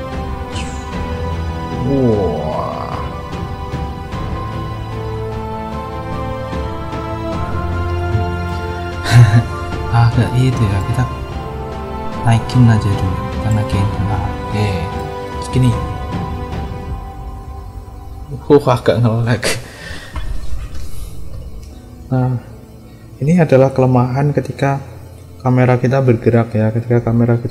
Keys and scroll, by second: 7.8 space, 15.6 space, 21.3 space.